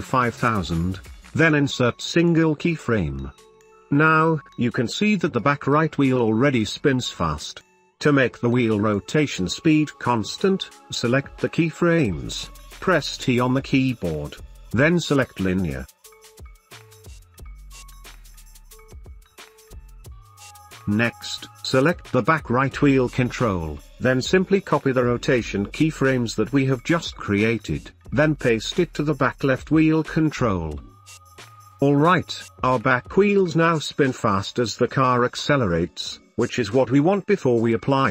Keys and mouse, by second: 1.4-1.9 drag, 2.2 space, 3.4 space, 7.3 space, 7.9 space, 11.8 space, 13.2 t, 15.5 drag, 15.7 space, 25.1 w, 27.2 middle click, 27.6-28.8 shift+middle drag, 29.0 w, 29.9 space, 33.5-35.7 shift+middle drag, 36.3-36.7 middle drag, 36.7 space.